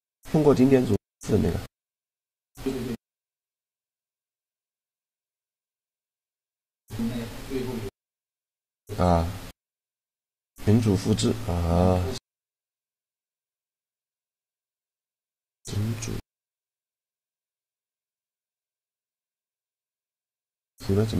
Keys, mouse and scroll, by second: 0.7 shift+a, 1.4 s, 2.3-6.0 drag, 3.1-4.6 right drag, 4.8-5.9 right drag, 6.0 right click, 8.1-10.4 drag, 11.1-13.5 middle drag, 18.3-20.3 drag.